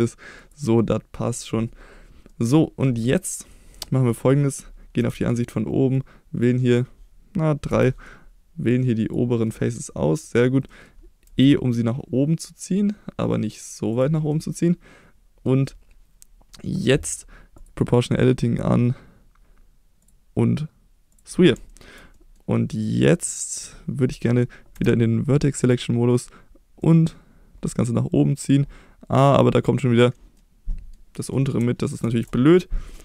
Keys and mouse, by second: 0.8 middle click, 2.3 middle click, 3.3 middle click, 3.9 middle click, 5.0 KP_7, 6.1 click, 7.7 3, 8.1-9.2 drag, 9.5-10.3 middle drag, 10.8 middle click, 11.3 e, 14.3-15.5 middle drag, 17.6 click, 20.1-21.5 drag, 21.7 shift+middle click, 22.2 middle click, 24.8 1, 26.8-30.0 drag, 30.4 middle click, 32.0 ctrl+z, 32.5 middle click.